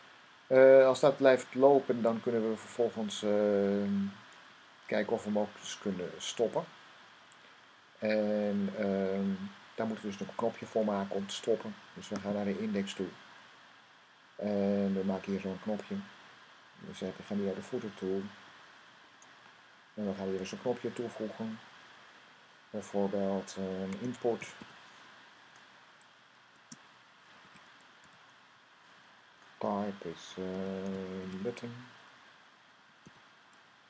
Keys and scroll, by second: 20.5 Up, 23.7-25.0 typing, 27.7-28.4 typing, 30.1-32.9 typing.